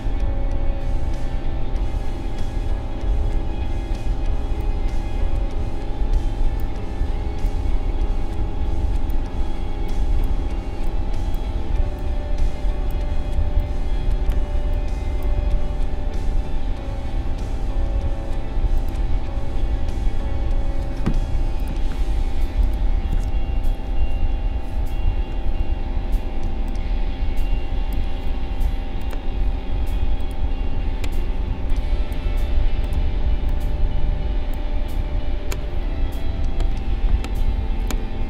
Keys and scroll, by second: 26.4 space, 31.4 space, 36.2 ctrl+s.